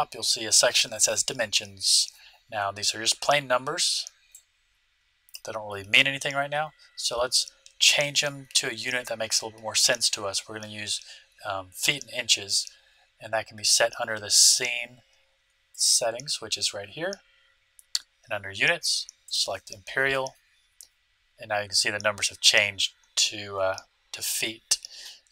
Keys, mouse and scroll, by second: 1.3 scroll up 1, 4.3-6.0 drag, 15.7-17.4 drag, 19.2-21.0 drag.